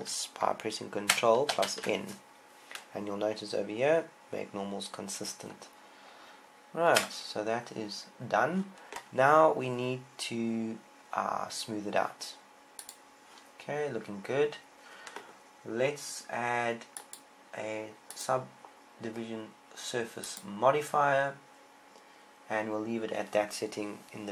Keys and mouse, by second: 2.4 ctrl+n, 7.8 Tab, 13.7-17.4 drag, 20.7 click.